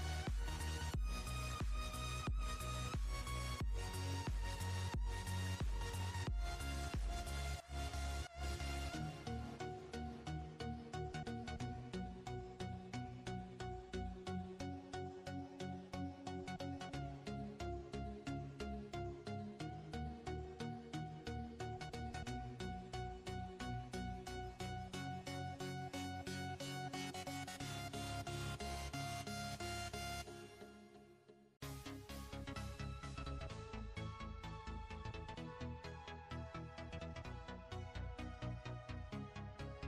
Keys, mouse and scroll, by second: 1.1-2.5 drag, 2.5-2.9 scroll up 1, 2.9 click, 3.3 Tab, 4.2-5.2 scroll up 1, 5.2 click, 6.9-7.7 scroll up 1, 8.0 alt+click, 9.5 click, 10.3 alt+click, 11.2 alt+click, 12.1 alt+shift+click, 12.6 alt+shift+click, 13.5 alt+shift+click, 14.2 alt+shift+click, 15.1 alt+shift+click, 16.5 alt+shift+click, 17.5 alt+shift+click, 18.9 alt+shift+click, 20.1 alt+shift+click, 24.3-25.8 scroll up 1, 25.8 shift+click, 26.6 shift+click, 27.6 shift+click, 28.3 shift+click, 29.4 shift+click, 30.7 shift+click, 32.4 shift+click, 33.4-34.2 scroll down 1, 34.2 shift+click, 34.7 shift+click, 35.4 shift+click, 36.5 click, 38.2 shift+click, 38.5 shift+click, 39.4 shift+click.